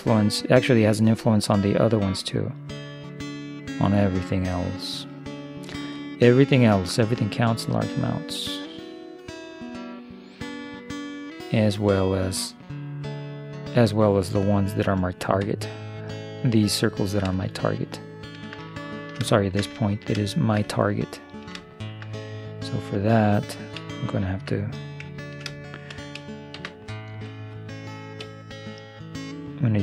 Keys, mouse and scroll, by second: 17.7-21.4 middle drag, 22.7-24.7 right drag, 25.3 middle click, 26.6 shift+s, 28.3-29.3 d, 29.3-29.8 drag.